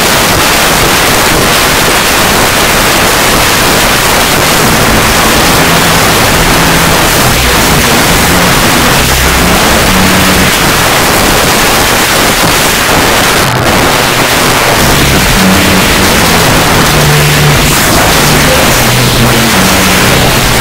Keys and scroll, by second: 10.5 Page_Down.